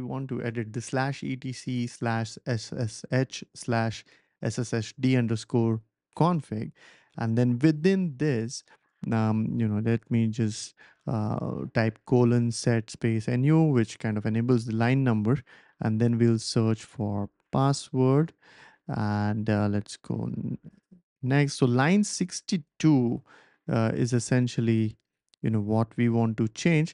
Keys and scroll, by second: 6.2 Return, 8.8-10.6 typing, 13.3-14.1 typing, 15.3-20.2 typing, 23.7-25.1 typing, 24.0 Down, 24.2 Down, 24.4 Down, 26.3-26.9 typing.